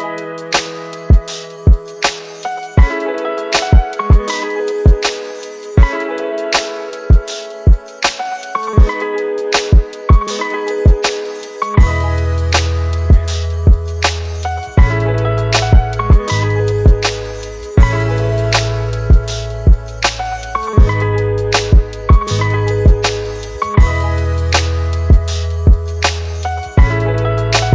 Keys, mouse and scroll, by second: 0.2-1.0 typing, 0.8 double click, 2.2-3.0 typing, 2.5 double click, 4.6 [, 4.8 double click, 5.9 typing, 6.5 double click, 14.2-14.7 typing, 15.0 double click.